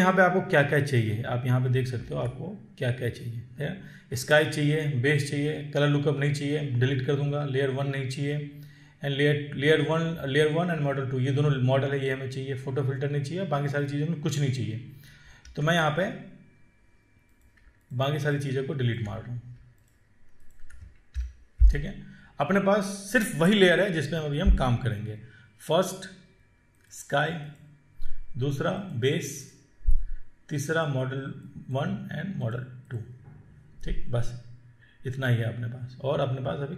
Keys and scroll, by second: 2.3 ctrl+1, 15.7 ctrl+1, 21.3 ctrl+Delete.